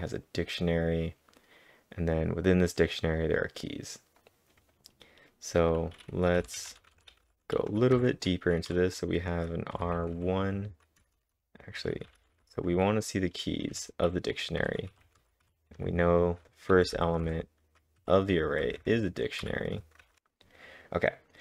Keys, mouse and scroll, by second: 4.2 click, 4.2-6.3 scroll down 1, 6.2-8.7 typing, 6.7-7.1 scroll up 2, 9.8 [, 12.2-15.5 typing, 16.7-17.4 typing, 18.6 typing, 20.0-21.4 typing, 20.2 Return, 20.2 Up, 20.2 ctrl+'.